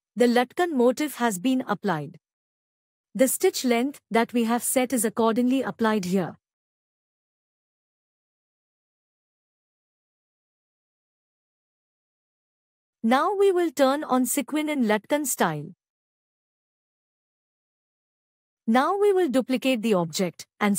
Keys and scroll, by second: 10.5 ctrl+e, 20.6 ctrl+alt+e.